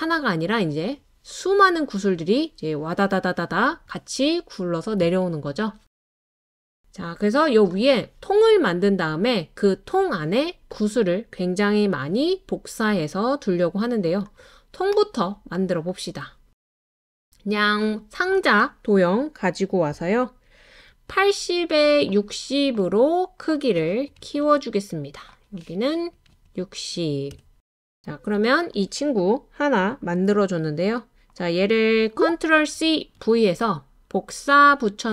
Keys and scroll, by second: 22.8-26.3 typing, 32.1 ctrl+c, 32.1 ctrl+v, 32.8 super+c, 33.2 super+v.